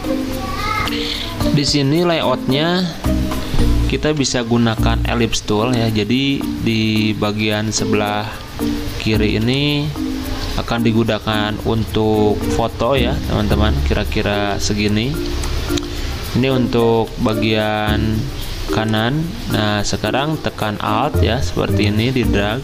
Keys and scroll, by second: 4.0 l, 8.4 d, 14.5 z, 16.9 v.